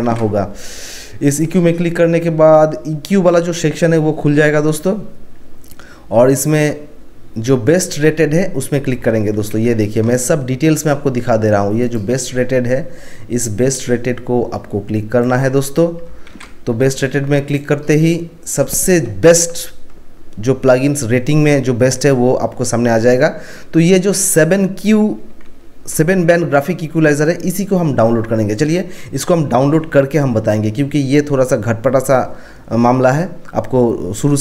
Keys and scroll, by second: 0.0 ctrl+1, 9.5 ctrl+1, 16.2 ctrl+1, 17.9 ctrl+1.